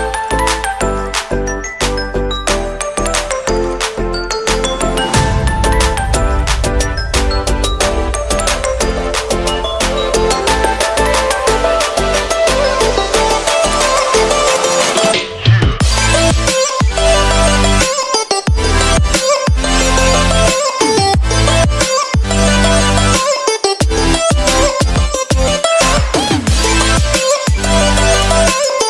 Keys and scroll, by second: 11.9 BackSpace.